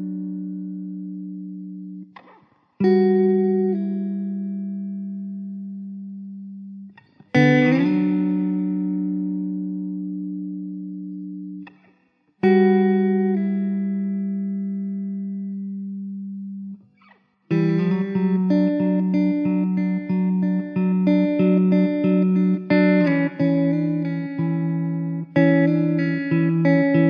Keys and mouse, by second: 2.4 middle click, 7.9 2, 8.3 middle click, 17.6 r, 19.5 w, 23.4 r, 25.7 w.